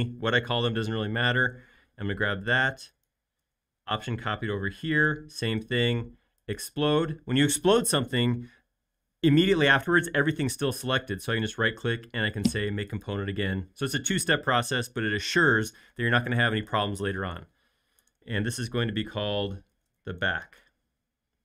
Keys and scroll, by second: 1.7 m, 19.4-21.0 typing.